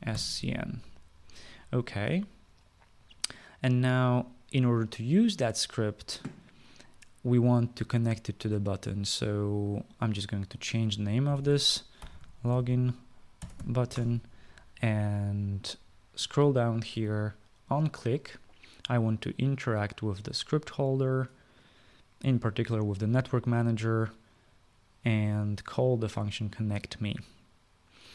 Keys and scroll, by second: 0.0-1.3 typing, 11.7-14.8 typing.